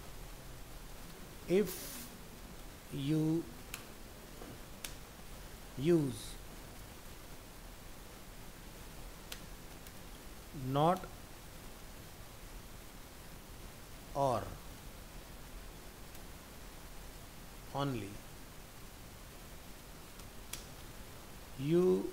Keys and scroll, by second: 7.5 ctrl+z.